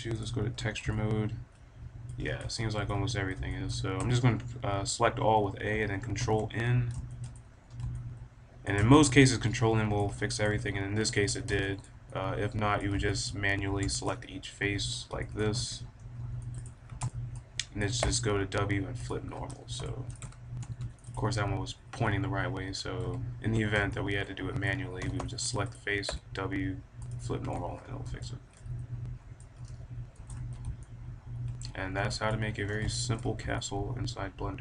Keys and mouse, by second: 0.4 click, 1.1 click, 1.3 click, 1.6 click, 2.1 middle click, 2.9 middle click, 3.9 a, 4.1-5.2 middle drag, 6.1 ctrl+n, 7.0 middle click, 7.6 middle click, 8.4 middle click, 9.8-13.5 middle drag, 13.5 a, 13.6 middle click, 14.1-15.2 middle drag, 15.2 click, 15.6 click, 15.6 b, 17.5 click, 17.9 w, 18.7 click, 19.0 middle click, 19.8-21.2 drag, 20.1 a, 20.6 b, 21.2-22.7 middle drag, 23.0 a, 23.9-25.4 drag, 25.0 b, 26.0 w, 27.5 a, 27.7-30.0 middle drag, 30.0 Tab, 30.8 right click, 30.9 middle click, 31.0 right click, 31.1 middle click, 31.2 right click, 31.2-31.8 middle drag, 32.0 middle click, 32.4-33.7 middle drag, 33.1 click, 33.7 click, 33.8 middle click, 33.9 click, 34.0-34.5 middle drag.